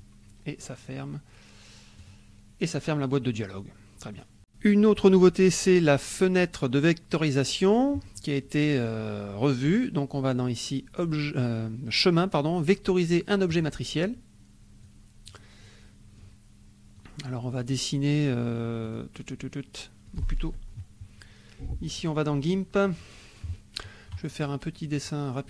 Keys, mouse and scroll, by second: 2.0 click, 3.4 middle click, 9.6 click, 13.7 click, 14.8 click, 15.7 middle click, 17.1 click, 18.8 click, 20.1 click, 22.0 click, 25.0 click.